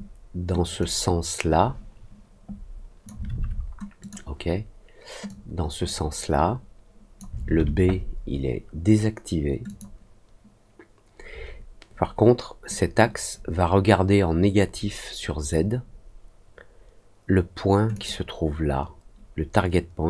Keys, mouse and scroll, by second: 0.7-3.0 drag, 3.9 click, 5.2-7.1 drag, 9.6 click, 17.9 click.